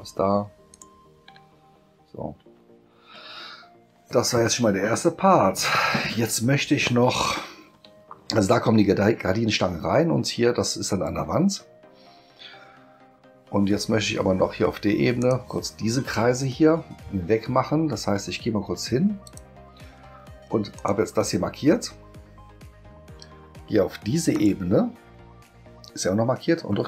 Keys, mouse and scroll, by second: 0.7 shift+click, 2.6 space, 15.2 click, 19.2 click, 20.7 click, 24.3 click.